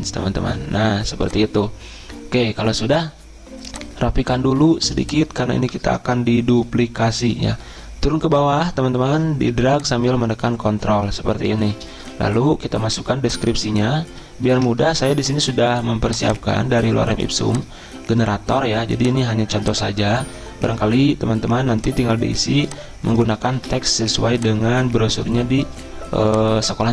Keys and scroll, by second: 14.5 super+m, 23.5 ctrl+c.